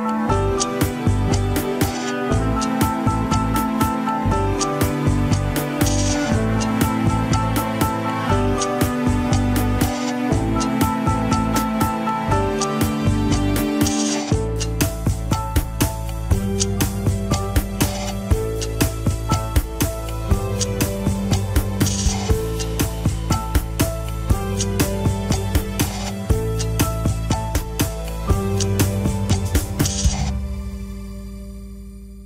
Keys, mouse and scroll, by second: 3.3-5.8 drag, 14.6-15.2 scroll up 2, 15.2 g, 22.5-22.9 scroll down 3, 22.9 middle click, 23.5 g, 28.3 middle click, 29.2 scroll down 2, 29.3 KP_1, 30.1 a, 30.7 alt+r, 31.1 alt+g, 31.6 ctrl+s, 32.1-32.2 shift+middle drag.